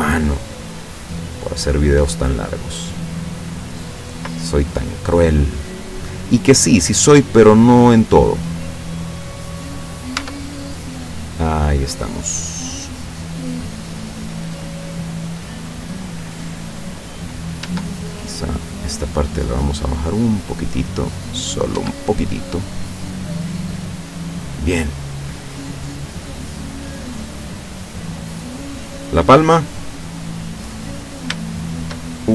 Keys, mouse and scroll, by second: 1.2 scroll down 1, 1.4-2.8 middle drag, 4.1-5.4 middle drag, 6.2 right click, 6.7-8.1 middle drag, 8.8-10.2 drag, 10.2 Tab, 10.5-13.0 middle drag, 13.0 scroll up 1, 13.9-16.7 middle drag, 16.7-17.2 scroll up 1, 17.2 right click, 18.7 right click, 19.6-21.7 drag, 21.8 Tab, 22.2-24.8 middle drag, 25.0 scroll down 1, 25.5 middle click, 25.6 scroll down 1, 26.1-26.9 scroll up 3, 26.9-27.5 scroll down 4, 27.7-28.6 middle drag, 28.9-30.8 middle drag, 30.9-31.3 scroll up 2, 31.4-32.1 shift+middle drag.